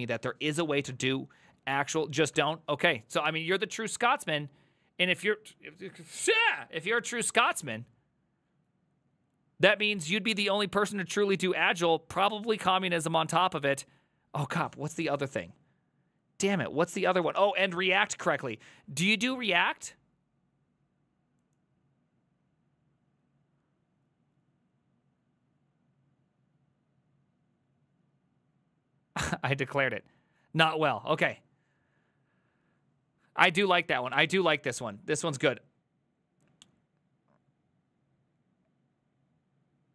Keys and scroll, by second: 1.1 alt+f, 2.2 alt+l, 2.4 alt+f.